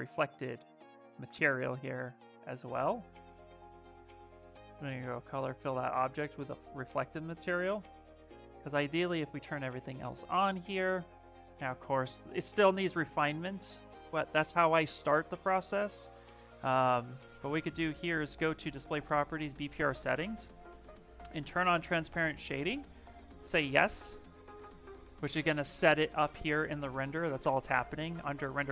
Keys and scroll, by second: 1.1 space.